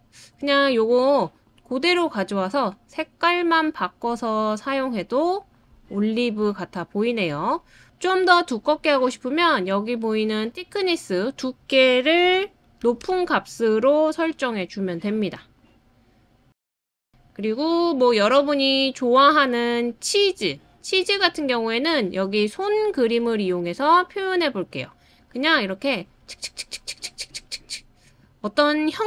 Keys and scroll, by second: 12.8 4, 13.0 Return.